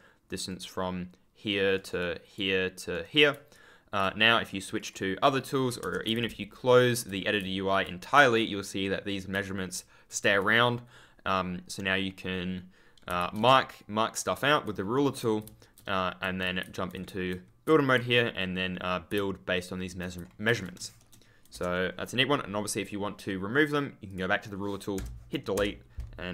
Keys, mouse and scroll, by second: 0.1 ctrl+click, 0.4 right click, 1.7 right click, 1.9 click, 2.8 right click, 3.5 ctrl+click, 6.0 ctrl+w, 6.1 ctrl+d, 9.3 ctrl+space, 9.7 ctrl+d, 13.0 ctrl+space, 13.1 ctrl+d, 15.3 ctrl+a, 16.5 ctrl+d, 17.0 ctrl+w, 17.6 ctrl+w, 19.0 ctrl+w, 19.1 ctrl+a, 20.7 shift+s, 24.0 click, 24.9 BackSpace, 26.2 w.